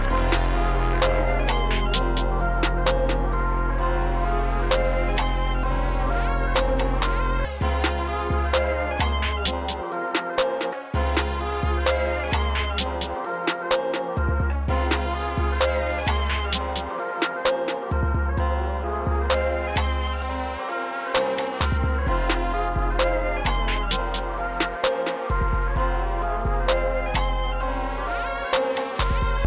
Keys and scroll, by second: 0.0 s, 1.3 super+s, 5.6 super+s, 14.6 space, 15.2 e, 16.6 super+b, 17.5 super+b, 21.8 super+b, 22.4 4, 24.2 super+s, 26.5 super+l, 26.9 super+s, 27.8 super+a, 29.4 space.